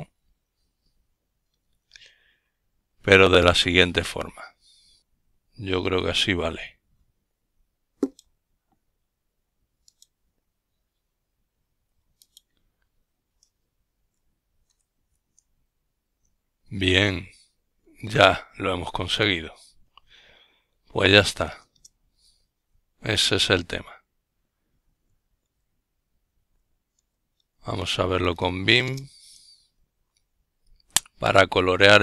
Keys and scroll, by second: 1.9 Up, 2.3 Up, 3.6 Return, 7.1-7.9 typing, 13.5 Up, 14.6 Up, 15.2 Up, 16.0 Up, 16.6 Up, 17.0 Up, 17.4 typing, 18.5-20.6 typing, 19.9 Down, 20.3 Down, 31.7 typing, 31.9 Right.